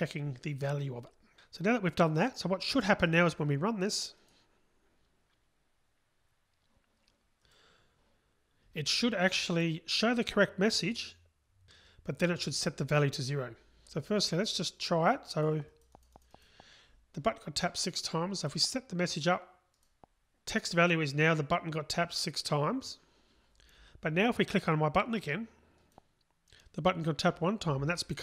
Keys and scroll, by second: 4.4 ctrl+shift+r, 7.8 ctrl+shift+r.